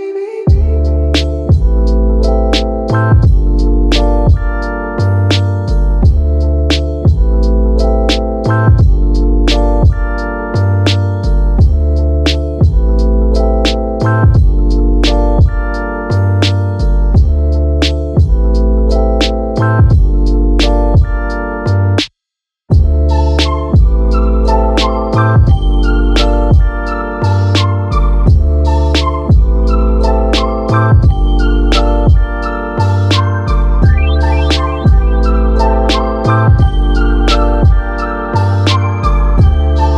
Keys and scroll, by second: 7.8 ctrl+g, 12.6 ctrl+a, 16.9 ctrl+a, 16.9 ctrl+c, 22.5 ctrl+a, 23.9 ctrl+c, 24.5 Escape, 28.3 ctrl+v, 29.0 Return, 32.2 ctrl+c.